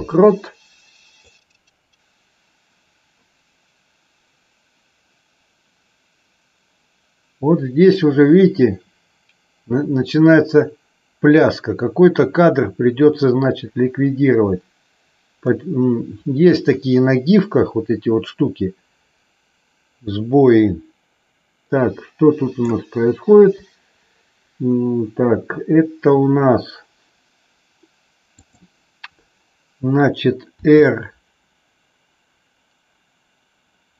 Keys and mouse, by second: 1.3-22.6 drag, 28.3 click, 30.6 r.